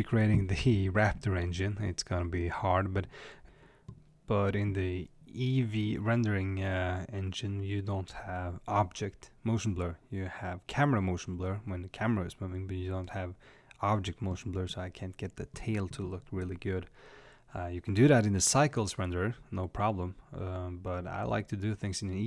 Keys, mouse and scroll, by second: 8.1 click, 8.9-11.4 middle drag, 11.4 click, 18.6 click.